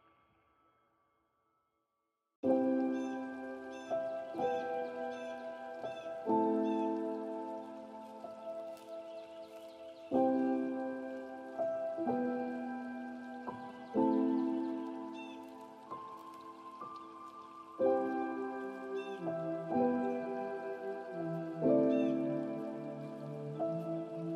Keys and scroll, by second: 13.6 ctrl+space, 16.4 ctrl+z.